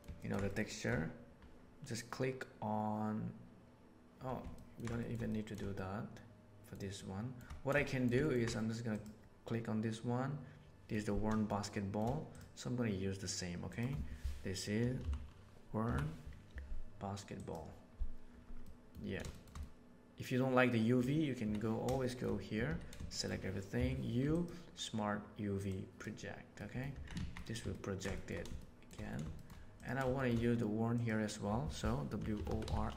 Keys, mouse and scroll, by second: 0.1 ctrl+middle click, 0.4 shift+middle click, 0.6 shift+middle click, 4.5 ctrl+middle click, 4.9 shift+middle click, 5.2 middle click, 5.7-6.5 shift+middle drag, 6.9-7.3 shift+middle drag, 7.8 shift+middle drag, 8.1 ctrl+middle click, 11.4-11.9 shift+middle drag, 13.7 click, 18.5-18.9 middle drag, 19.2 shift+middle click, 19.5-20.9 middle drag, 21.3 Tab, 21.9 middle click, 22.6 a, 23.0 shift+middle click, 23.7 u, 26.5 middle click, 26.9 Tab, 27.1 alt+a, 27.3 middle click, 27.6-28.3 ctrl+middle drag, 28.5-28.9 shift+middle drag, 29.3 shift+middle click, 30.1 shift+middle click, 31.0-32.9 drag.